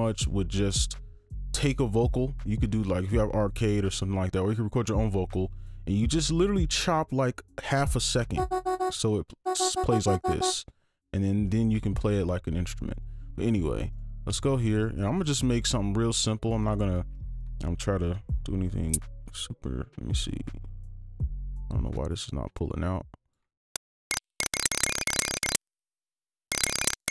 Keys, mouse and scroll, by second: 8.4 double click, 13.9 right click, 17.3 ctrl+a, 18.1 Caps_Lock, 18.6-19.4 typing, 21.2 alt+click, 23.5 right click, 23.9 ctrl+click, 24.1-27.1 typing, 24.3-24.6 shift+scroll down 2, 25.3 right click, 25.5 click, 25.9 click, 26.3 right click, 26.4 scroll down 1, 26.6 right click, 27.0 alt+scroll up 2.